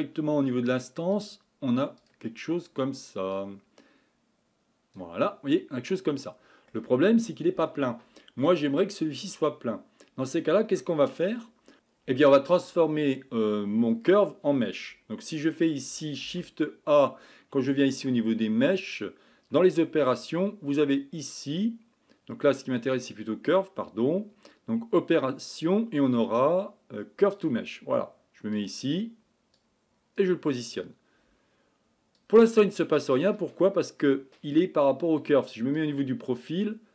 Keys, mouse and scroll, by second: 3.3-5.0 drag, 5.5-5.9 scroll down 2, 5.9-27.5 middle drag, 30.2 click, 35.8 click.